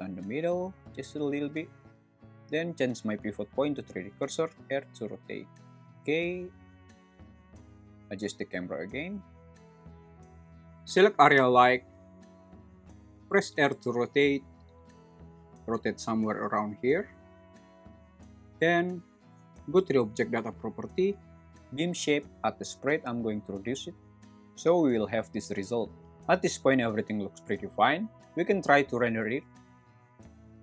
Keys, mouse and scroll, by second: 1.8 ., 4.5 r, 6.7 click, 7.3 g, 7.5 y, 9.7 click, 10.8 click, 15.0 r, 17.9 `, 22.4-26.2 drag.